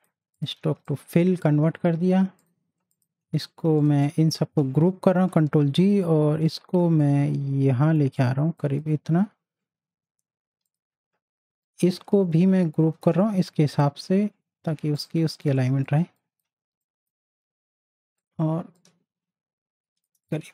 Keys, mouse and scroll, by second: 0.6 z, 0.8-2.4 drag, 5.1 ctrl+g, 6.0-8.2 drag, 8.6-12.9 drag, 12.9 ctrl+g, 13.5 click, 15.5 z, 15.8 click, 16.1 space, 16.1-20.2 drag, 20.4 z.